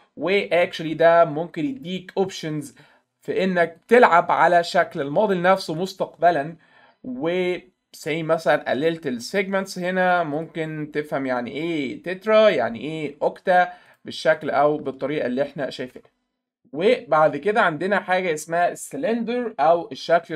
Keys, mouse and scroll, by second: 3.9-5.0 alt+middle drag, 5.3 middle click, 5.5 alt+middle click, 9.3 click, 9.7 click, 10.4 click, 12.3 click, 13.9 click, 14.4 click, 14.9-16.0 alt+middle drag.